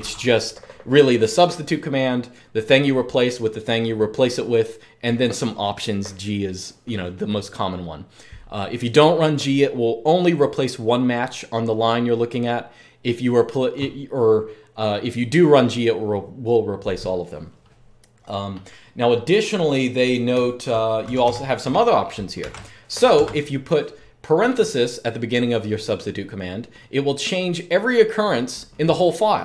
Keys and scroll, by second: 20.0-22.1 typing, 23.0 Escape.